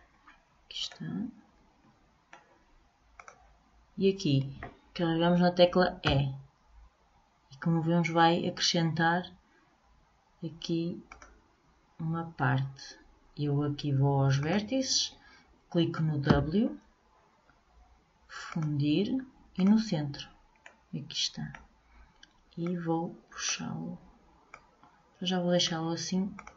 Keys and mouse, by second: 3.3-5.1 drag, 6.2 e, 14.5-16.4 drag, 16.5 w, 20.8-22.8 middle drag, 22.8-26.4 drag.